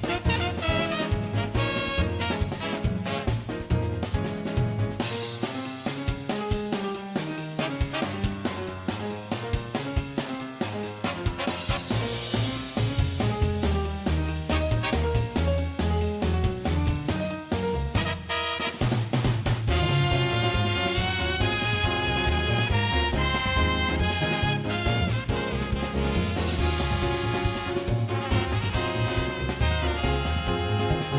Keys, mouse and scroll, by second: 0.0-0.7 typing, 0.0 middle click, 0.4 click, 0.5 middle click, 0.7 middle click, 0.9 middle click, 1.0 shift+click, 1.5 middle click, 1.6 middle click, 1.8 g, 2.1 g, 2.2 middle click, 2.6 middle click, 2.8 middle click, 5.2 middle click, 5.4 middle click, 5.6 right click, 5.7 middle click, 5.8 shift+right click, 5.9 middle click, 6.1 ctrl+shift+z, 6.2 ctrl+shift+z, 6.2 shift+click, 6.3 middle click, 6.9 e, 6.9 middle click, 7.3 g, 7.3 middle click, 7.7 middle click, 7.7 f, 8.3 middle click, 8.4 middle click, 8.6 shift+click, 8.9 middle click, 8.9 m, 9.2 right click, 9.2 g, 9.3 g, 9.4 middle click, 9.5 right click, 9.6 g, 9.6 middle click, 9.8 middle click, 10.2 shift+click, 10.2 middle click, 10.3 middle click, 10.7 shift+click, 10.7 shift+g, 10.9 middle click, 11.7 middle click, 11.8 middle click, 11.9 middle click, 12.2 middle click, 12.7 middle click, 13.1 middle click, 13.3 g, 13.8 middle click, 14.0 middle click, 14.3 middle click, 15.1 middle click, 15.3 middle click, 15.6 ctrl+click, 17.2 middle click, 17.3 middle click, 17.4 middle click, 17.7 middle click, 17.7 g, 18.1 middle click, 18.5 middle click, 18.6 middle click, 18.6 g, 20.4 middle click, 20.9 middle click, 21.7 Tab, 21.8 middle click, 22.5 Tab, 22.8 s, 22.9 shift+click, 23.4 s, 23.6 Tab, 23.6 middle click, 23.6 a, 26.0 middle click, 26.4 middle click, 26.9 middle click, 27.2 middle click, 27.3 Tab, 27.5 click, 27.5 middle click, 29.0 middle click, 29.1 middle click, 29.3 middle click, 29.4 middle click, 30.5 middle click.